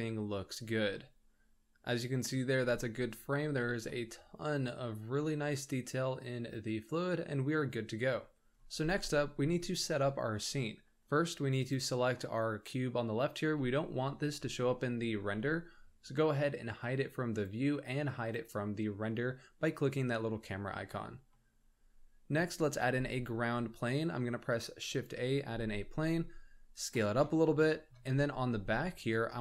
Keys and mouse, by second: 1.4-2.3 middle drag, 3.9-7.6 middle drag, 11.7 click, 17.3 click, 21.3-22.3 middle drag, 22.8 shift+a, 25.5 s, 27.6-27.9 shift+middle drag, 28.3 middle click, 28.9 Tab.